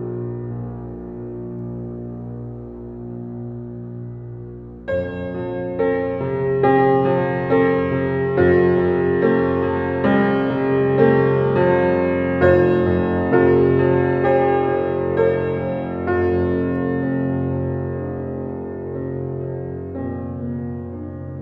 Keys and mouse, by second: 0.0 click, 0.9 click, 4.3 1, 5.0 ctrl+alt+click, 11.2 click, 13.0 click, 17.5 click, 19.1 click.